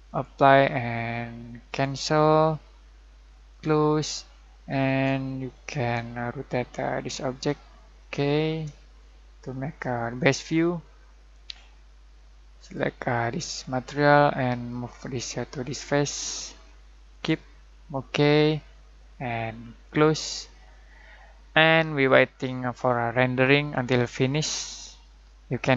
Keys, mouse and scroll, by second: 5.2-7.5 shift+middle drag, 8.7-10.3 shift+middle drag, 12.5-15.9 drag, 19.8 click.